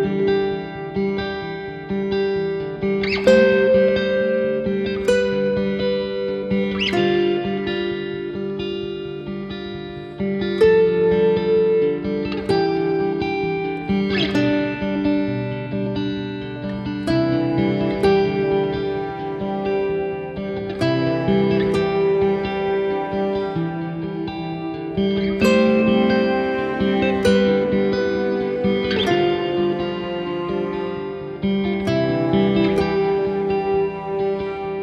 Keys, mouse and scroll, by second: 0.5-1.4 scroll down 10, 1.4 KP_7, 2.9 r, 3.2 shift+z, 3.3 scroll up 4, 3.6 click, 4.3 click, 5.1 r, 8.8 scroll up 2, 9.4 scroll up 6, 9.7 shift+middle click, 10.4 r, 13.4 Tab, 15.2 Tab, 16.0 s, 21.7 KP_7, 22.4 `, 23.0 Escape, 23.6 click, 23.6-24.0 scroll down 4, 24.0 KP_7, 24.6 click, 24.8 click, 25.4 KP_7, 25.4 KP_1, 25.9-26.7 scroll down 6, 26.1 KP_7, 26.9 shift+middle click, 27.9-28.5 scroll up 14, 28.6 shift+middle click, 29.1 scroll up 2, 29.9 shift+right click, 30.1 scroll up 2, 30.4 shift+middle click, 30.7-31.4 scroll up 14, 31.8 shift+right click, 32.0-33.0 scroll up 8, 32.2 shift+middle click, 33.5 shift+right click, 34.1 shift+right click, 34.3-34.8 shift+scroll up 5.